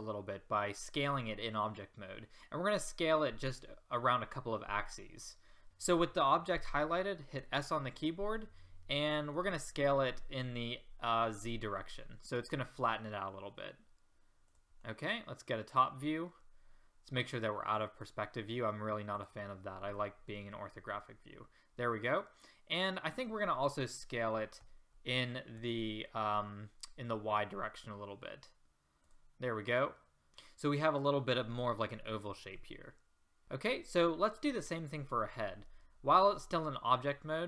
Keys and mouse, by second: 4.6 middle click, 7.3 s, 15.0-17.1 middle drag, 19.2 click, 20.6-24.6 middle drag, 24.6 s, 29.6-30.3 middle drag.